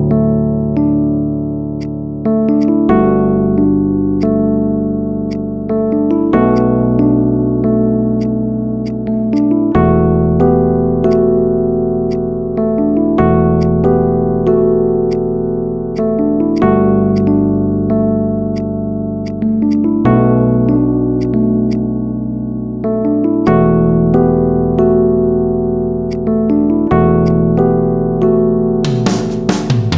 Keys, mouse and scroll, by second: 0.6-1.6 scroll up 4, 0.8 shift+middle click, 1.7-3.6 drag, 3.6 scroll up 1, 4.2 drag, 4.4 middle click, 5.2 click, 6.4-8.0 drag, 8.2 click, 8.7 click, 10.0-11.0 middle drag, 11.0 click, 12.0-13.6 drag, 14.2-15.0 middle drag, 15.0 click, 15.9-16.4 drag, 20.0-21.0 middle drag, 21.0 click, 23.4-24.6 drag, 24.6-26.0 middle drag, 26.0-26.6 drag, 26.6-26.9 scroll down 1, 27.4-29.9 middle drag.